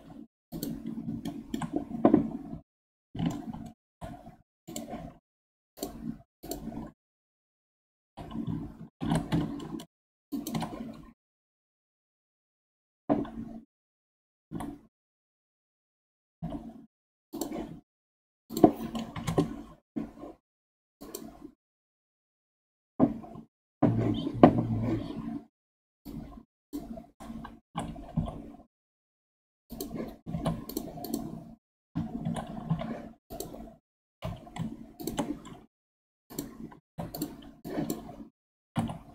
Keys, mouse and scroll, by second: 1.3-2.5 shift+middle drag, 2.5 g, 5.8-8.1 drag, 8.1 g, 11.6 KP_1, 14.5 e, 18.5-21.0 drag, 26.0 click, 27.7 e, 30.3 ctrl+Tab, 31.0 click, 32.2 shift+d, 34.1 g, 36.3 click, 36.8 ctrl+Tab, 37.6 click, 38.6 g.